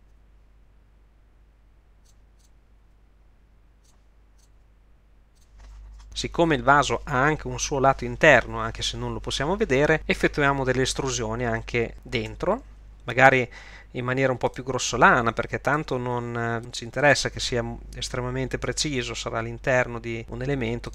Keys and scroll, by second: 0.0 g, 2.8 g, 4.5 g, 12.3 e, 15.8 r, 18.7 g.